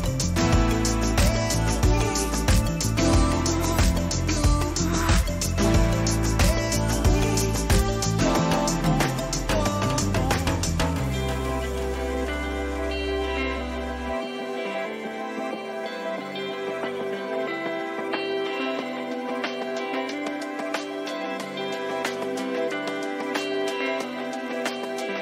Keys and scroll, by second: 12.6 ctrl+t, 22.0 Return, 22.8 ctrl++.